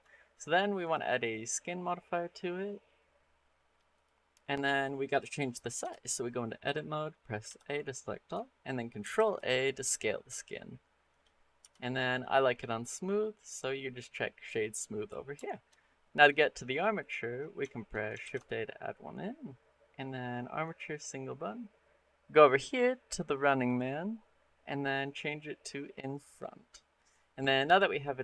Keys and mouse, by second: 0.6-3.9 drag, 4.9 click, 5.6 Tab, 7.3 a, 8.9 ctrl+a, 10.9 click, 11.4 Tab, 12.5 click, 15.3 shift+click, 15.4 shift+middle click, 15.6-16.1 middle drag, 16.8 click, 17.5 shift+middle click, 18.0 shift+a, 20.9 middle click, 23.4 click, 25.0 click, 26.8 middle click, 27.7 shift+middle click.